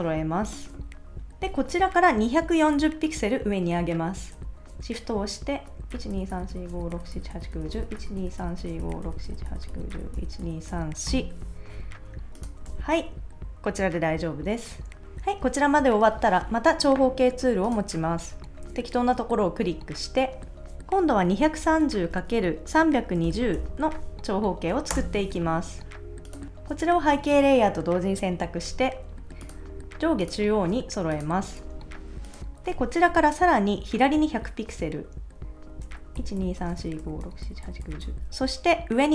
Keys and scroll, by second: 5.9 shift+Up, 6.7 shift+Up, 7.3 shift+Up, 9.5 shift+Up, 10.2 shift+Up, 10.7 shift+Up, 12.7 super+s, 21.3-24.1 typing, 24.9 Return, 31.6 super+s, 36.2 shift+Left.